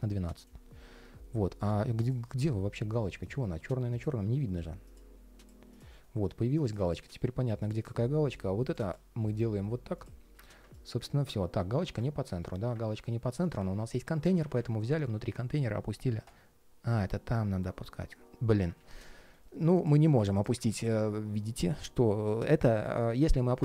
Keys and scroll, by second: 6.9 ctrl+shift+4, 11.3 ctrl+shift+3, 12.2 ctrl+shift+3, 18.5 super+z, 19.0 ctrl+shift+3.